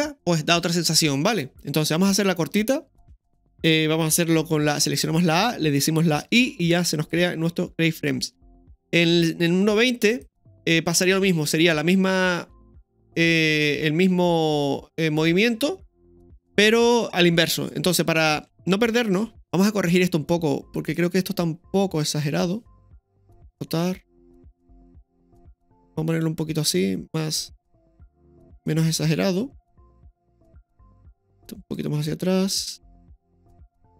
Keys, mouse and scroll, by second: 4.7 a, 9.1-10.2 drag, 17.9-18.6 scroll up 2, 18.6-19.3 shift+middle drag, 19.4 KP_0, 19.4 KP_3, 19.4 KP_1, 19.8-20.9 scroll down 1, 20.9 click, 22.0 right click, 23.5 r, 30.8 right click, 31.7-33.3 drag, 33.3 right click.